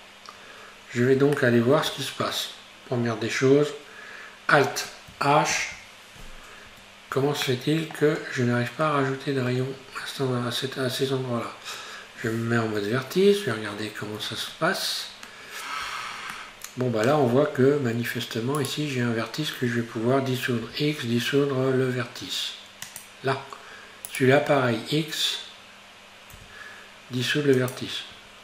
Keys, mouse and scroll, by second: 1.4-3.1 shift+middle drag, 3.1-5.5 scroll up 1, 5.5 alt+h, 6.7 Tab, 7.2 Tab, 7.5-9.9 middle drag, 9.9-12.7 scroll up 1, 12.7 1, 13.8-15.1 scroll up 1, 15.1-16.4 scroll down 1, 16.4-18.6 shift+middle drag, 18.6 right click, 20.7 x, 24.1 right click, 26.4 x, 28.2 Tab.